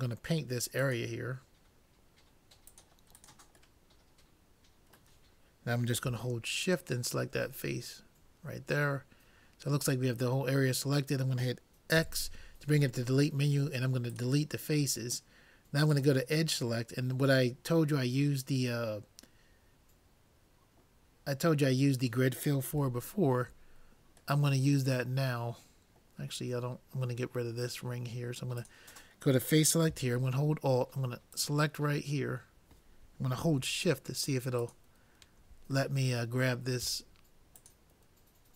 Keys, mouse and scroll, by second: 3.8-5.7 middle drag, 6.6-8.7 drag, 7.7 middle click, 8.7 middle click, 12.1 x, 15.9-17.7 drag, 16.8-18.6 middle drag, 21.2-23.1 middle drag, 28.6-30.3 drag, 31.4-33.1 drag, 34.6-36.0 drag, 36.0-37.4 middle drag, 37.6-38.5 drag.